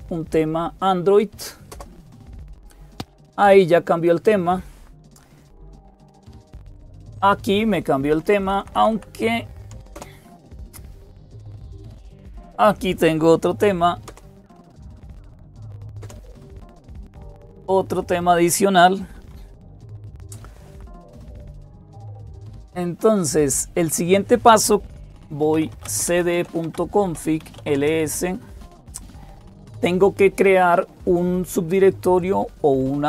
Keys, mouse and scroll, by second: 0.0-33.0 typing, 1.5 Return, 5.5 Escape, 6.5 Return, 7.9 Down, 8.1 Down, 8.2 Down, 8.4 Down, 8.6 Down, 9.8 Down, 9.8 Return, 13.9 Return, 14.8 Down, 15.8 Return, 19.1 Escape, 20.5 Down, 23.1 click, 26.8 Return.